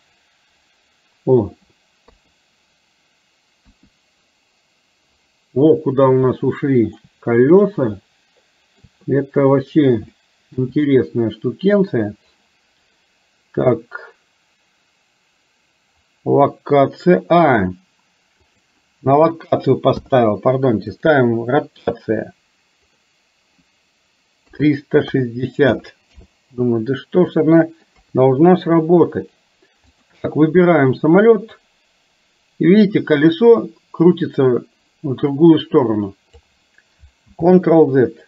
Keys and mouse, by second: 2.0 KP_3, 3.8 KP_1, 6.4 shift+middle click, 8.1 shift+middle click, 10.1 shift+middle click, 18.7-20.1 drag, 21.0 click, 23.0-26.3 drag, 27.4 middle click, 28.0 KP_3, 31.5-36.5 drag, 37.4 ctrl+z.